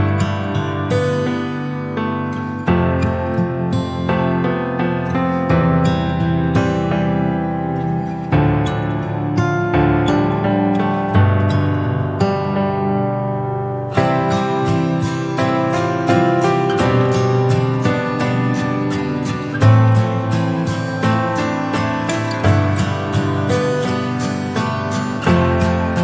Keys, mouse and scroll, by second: 0.0 click, 0.2 scroll down 4, 0.4-0.9 middle drag, 0.9 alt+z, 1.1-1.8 scroll up 5, 1.8 drag, 2.1 scroll down 2, 2.4-3.4 middle drag, 3.4 click, 3.9 KP_1, 5.1 KP_3, 5.8 shift+middle click, 6.2 scroll up 2, 6.4 Tab, 7.1 alt+z, 7.3 click, 7.9 click, 9.4 Tab, 9.6 click, 9.9 scroll down 1, 10.4 alt+z, 10.9-12.5 shift+middle drag, 12.5 scroll up 2, 13.9 click, 15.4 r, 16.4 click, 17.2 click, 17.6 Tab, 18.2 alt+z, 18.5 click, 19.2 click, 20.1 Tab, 20.4 click, 21.1 alt+z, 24.1-24.7 scroll down 2, 24.7-25.2 shift+middle drag, 25.2 shift+right click, 25.9 shift+a.